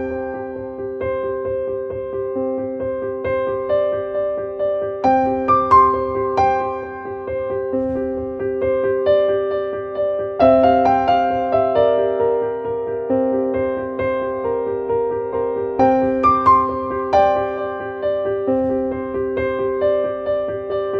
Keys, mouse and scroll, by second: 2.0 click, 3.5-6.7 drag, 7.6 click, 9.9 click, 11.9-15.3 drag, 16.9-20.6 drag, 20.6-20.9 drag.